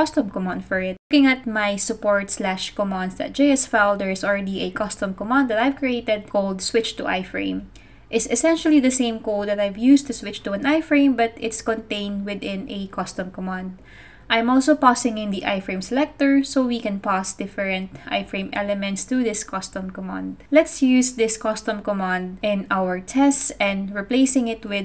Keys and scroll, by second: 24.5-24.8 typing.